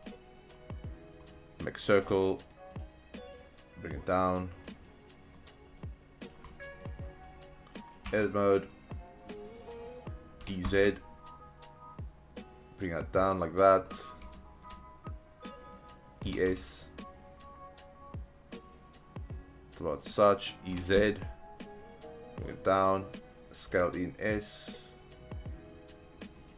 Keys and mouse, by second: 1.3-1.6 middle drag, 2.0 s, 2.7 click, 3.5-4.6 drag, 4.8-5.4 middle drag, 5.8 click, 6.5-6.8 middle drag, 7.3 click, 8.1 Tab, 8.3 middle click, 10.4 e, 10.6 z, 13.6 click, 14.3 shift+middle drag, 14.8-15.8 middle drag, 16.3 e, 16.5 s, 20.1 click, 20.7 e, 21.0 z, 22.4 click, 23.7 s, 26.4 click.